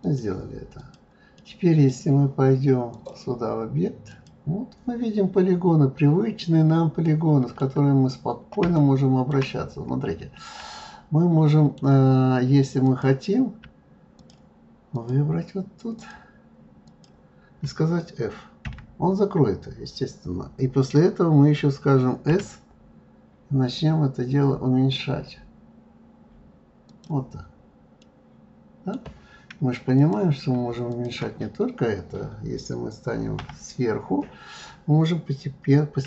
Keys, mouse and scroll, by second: 0.0 click, 0.8 click, 1.3-2.9 middle drag, 2.9-5.9 drag, 6.4-7.0 scroll up 2, 7.0 middle click, 8.0-8.7 scroll down 2, 8.7 shift+middle click, 9.5-10.3 scroll up 3, 10.7-12.8 middle drag, 12.8 click, 14.2 shift+click, 14.9 shift+click, 16.0 shift+click, 16.9 shift+click, 18.6 f, 27.6-28.0 scroll down 1, 28.0-30.0 middle drag, 30.0 click, 30.9 shift+click, 33.3 KP_7.